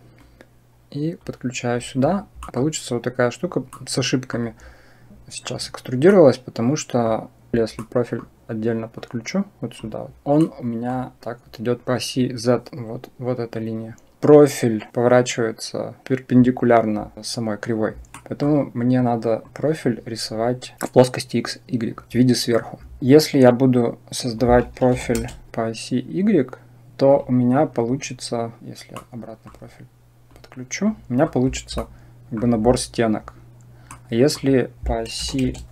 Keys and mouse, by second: 0.1-1.1 drag, 2.3 middle click, 3.7 middle click, 6.1-6.9 middle drag, 7.6 middle click, 8.8 click, 10.3-10.8 middle drag, 12.7-14.1 drag, 18.1 middle click, 19.3 click, 24.2 click, 25.5-26.9 drag, 28.8-29.4 middle drag, 30.2-30.7 drag, 31.0 middle click, 31.7-32.2 middle drag, 33.8 middle click, 34.7 click.